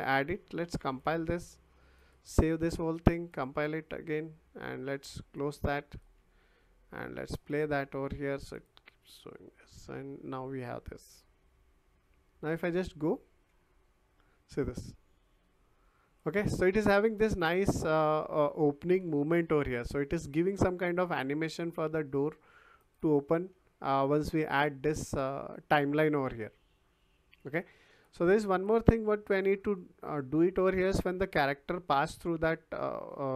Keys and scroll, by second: 11.2 w, 14.8 s, 15.8 w, 18.7 Escape.